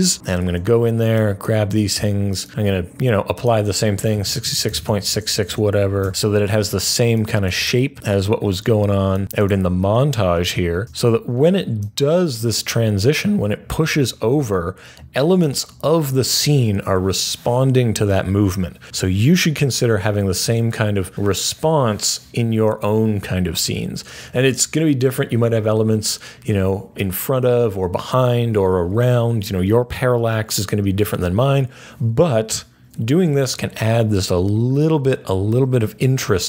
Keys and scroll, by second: 0.3 F3, 3.8-6.5 typing, 9.2 F3, 10.5 typing.